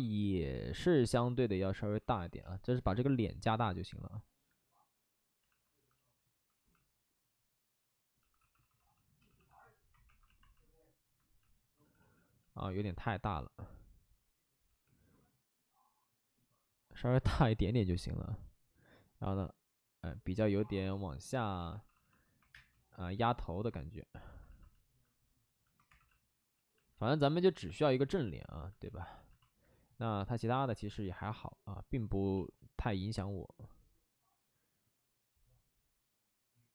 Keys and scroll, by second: 2.0 w, 5.4 alt+s, 5.9 shift+f, 7.9 alt+s, 8.3-10.0 typing, 11.7 ctrl+z, 11.9 ctrl+z, 12.3 ctrl+z, 13.1 ctrl+z, 14.7 w, 20.5 2, 21.5-22.4 typing, 24.2 alt+s, 24.4 alt+s, 25.8 2, 28.2 2, 29.1 alt+f, 30.6 alt+f, 34.2 ctrl+z.